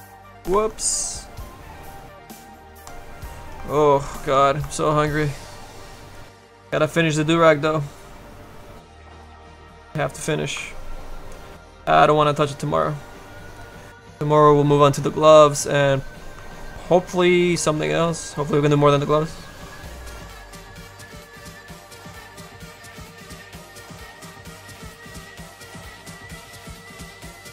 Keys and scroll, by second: 0.2 ctrl+z, 0.6 ctrl+z, 11.7 s, 18.9 s.